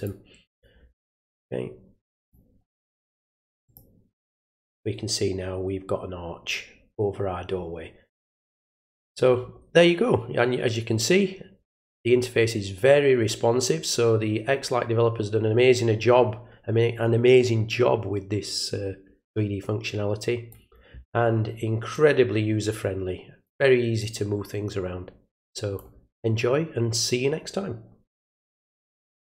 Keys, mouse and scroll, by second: 0.5 click, 2.2 click, 3.6 click, 8.5 click, 11.0-20.5 drag, 21.9-23.4 drag, 24.0-25.7 drag, 29.2 click.